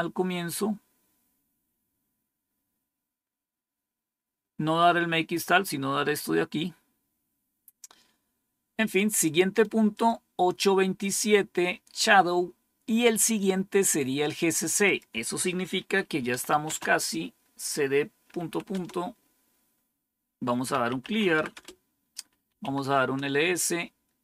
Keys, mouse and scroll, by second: 1.6 scroll down 1, 3.8 scroll down 2, 5.6 scroll down 2, 6.5-7.0 scroll down 4, 9.8 click, 14.7 click, 16.0-16.9 typing, 18.1-18.9 typing, 20.3-22.9 typing.